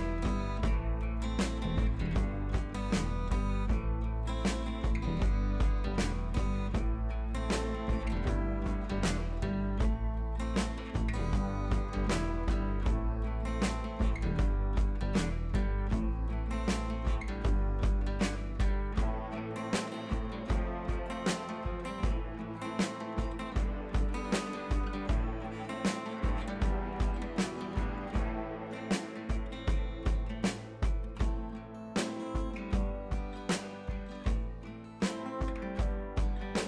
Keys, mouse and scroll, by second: 0.1 scroll down 1, 1.3 ctrl+click, 3.3 ctrl+shift+i, 3.9-5.7 typing, 5.1-5.5 click, 6.1 right click, 6.4 click, 6.7 scroll down 1, 7.1-10.9 drag, 12.1 ctrl+shift+i, 12.5 scroll up 1, 13.7 b, 13.8 right click, 14.2 click, 16.2 click, 16.5 [, 16.5 click, 16.8 [, 16.9 [, 17.0 click.